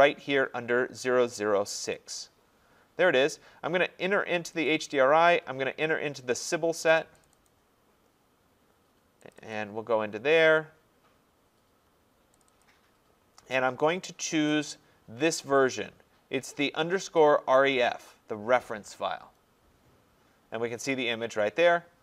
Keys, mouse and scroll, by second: 1.9 click, 2.1 click, 4.5 click, 4.7 click, 7.3 click, 7.5 click, 9.3 click, 9.5 click, 12.4 click, 12.6 click, 14.7 click.